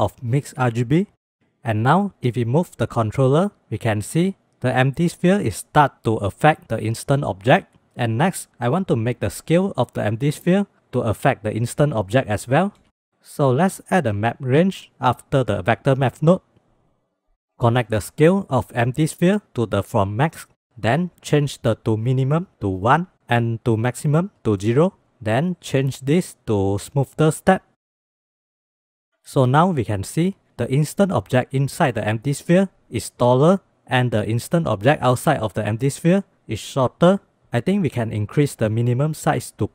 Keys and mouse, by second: 2.0 click, 3.0-7.9 drag, 9.1 s, 12.2 ctrl+z, 12.7 ctrl+s, 13.7 shift+a, 17.7-19.8 drag, 21.3-25.0 drag, 25.8-27.1 drag, 27.7 click, 28.0-28.4 shift+middle drag, 28.4 click, 28.6 middle click, 28.9 shift+middle click, 28.9 shift+click, 29.0 shift+middle click, 38.1-38.8 drag, 39.5-39.7 drag.